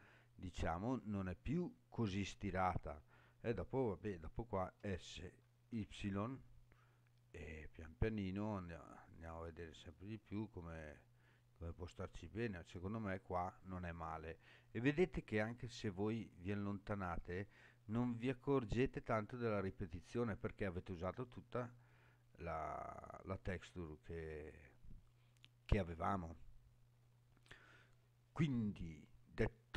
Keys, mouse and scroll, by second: 0.1-1.1 scroll up 5, 1.1-1.5 scroll down 5, 2.0 scroll down 2, 4.6 s, 5.7 y, 12.5 click, 13.9-14.2 scroll down 5, 15.1-15.7 scroll down 6, 16.4 scroll down 1, 19.5-19.9 scroll up 6, 24.1 scroll down 3.